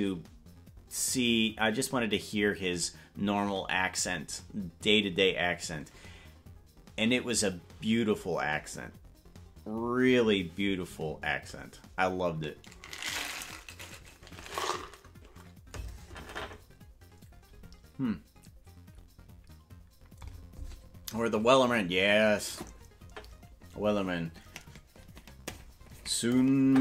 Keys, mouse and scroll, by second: 5.8 scroll up 1.